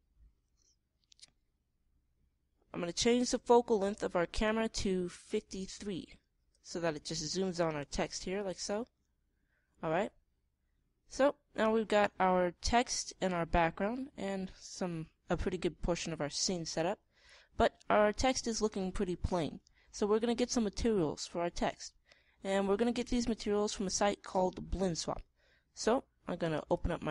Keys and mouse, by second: 8.5-10.9 middle drag.